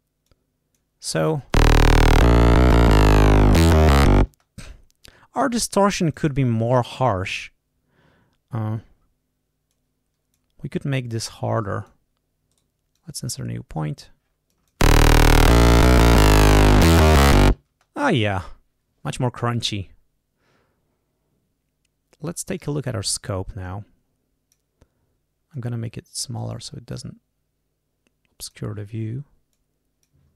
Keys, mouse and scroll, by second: 0.2 click, 1.1 click, 1.4 space, 4.2 space, 6.0 click, 9.6 click, 11.1 click, 12.5 right click, 12.9-14.2 drag, 14.4 click, 14.8 space, 17.7 space, 22.3 click, 23.6-24.7 drag, 25.5-26.7 drag, 27.0-28.7 drag, 29.5 click.